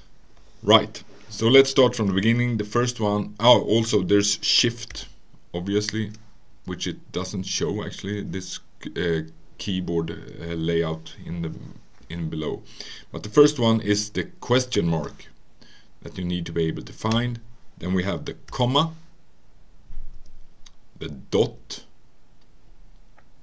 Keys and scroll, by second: 4.9 n, 6.5 BackSpace, 14.7 Return, 18.5 ', 20.2 Return, 21.4 ..